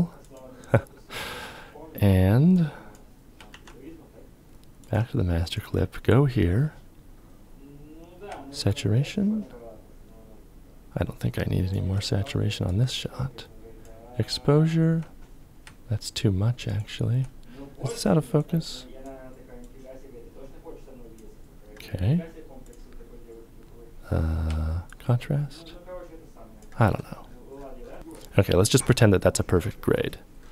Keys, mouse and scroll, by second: 3.0 ctrl+y, 3.1 ctrl+f, 8.3 ctrl+click, 12.3 ctrl+click, 16.3 ctrl+click, 24.5 ctrl+click, 28.0 Return, 28.0 KP_0, 28.0 KP_5.